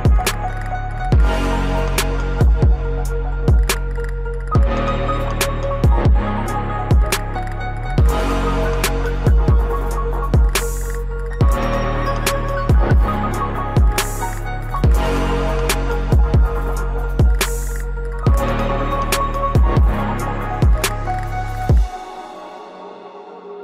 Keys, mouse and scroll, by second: 0.8-1.2 scroll up 1, 2.4 ctrl+shift+q, 3.2 click, 8.9 click, 12.1 scroll down 1, 12.9 click, 13.4 scroll down 1, 14.8 scroll up 1, 15.1-17.9 ctrl+drag, 19.5-19.9 scroll up 1, 20.9 shift+click, 23.4 shift+right click.